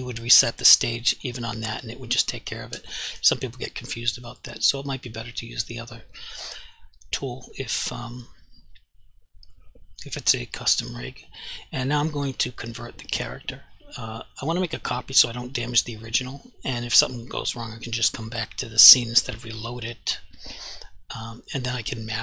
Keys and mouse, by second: 5.6 click, 11.0 click, 14.4 click.